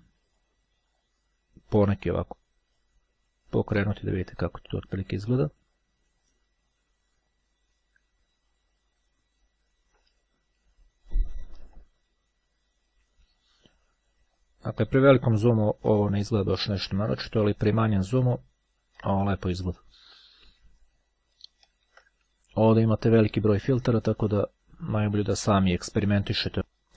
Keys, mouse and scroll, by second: 0.9 click, 10.3 ctrl+scroll down 2, 10.9-11.8 ctrl+scroll down 2, 14.5-15.1 ctrl+scroll up 2, 17.1-17.9 ctrl+scroll down 2, 21.3 ctrl+z, 23.5 click.